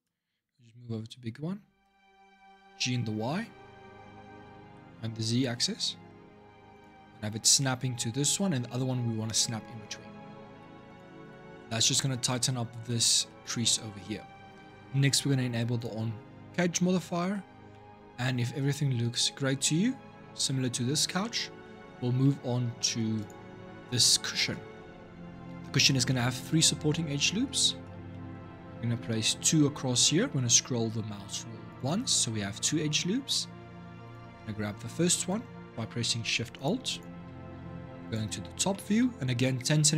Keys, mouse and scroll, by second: 0.0 scroll down 3, 0.7-2.4 scroll up 1, 2.4 g, 7.5 scroll up 2, 10.2 ctrl+r, 11.6 middle click, 12.1-12.8 scroll down 3, 12.8-15.6 middle drag, 15.6 click, 16.1-16.5 scroll down 2, 16.5-20.5 middle drag, 21.0-22.0 middle drag, 22.0 Tab, 22.5 shift+middle click, 23.0 click, 24.6 Tab, 25.5-29.1 middle drag, 29.1 ctrl+r, 32.7 middle click, 33.4 scroll up 2, 33.8 click, 36.3 alt+shift+click, 36.7 alt+shift+click, 37.8 click, 38.5 shift+middle click, 38.9-39.9 scroll up 3.